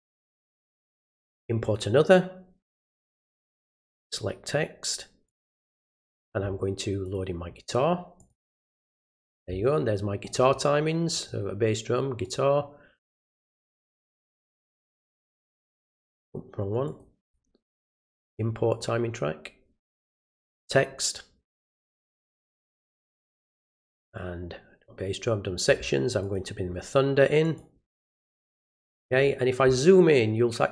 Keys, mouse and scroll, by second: 1.6 click, 3.8 click, 5.2 click, 7.0 click, 8.2 click, 11.1 click, 12.2 click, 13.3 click, 14.2 right click, 15.3 click, 16.8 click, 17.6 right click, 18.7 click, 20.5 click, 22.1 click, 26.2 click, 27.4 click.